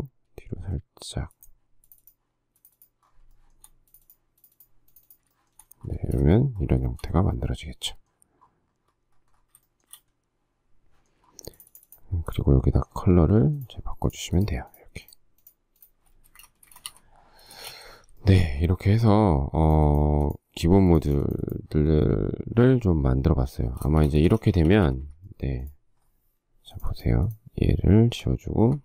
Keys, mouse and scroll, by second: 3.5 shift+middle click, 5.5 shift+middle click, 6.1 space, 6.3 Escape, 7.1 shift+middle click, 9.9 shift+middle click, 16.4 space, 16.6 Escape, 17.1 Escape, 17.7 space, 17.8 Escape, 18.4 shift+middle click, 19.5 shift+middle click, 21.3 click, 24.1 space, 24.2 Escape, 24.8 Escape, 28.3 Delete.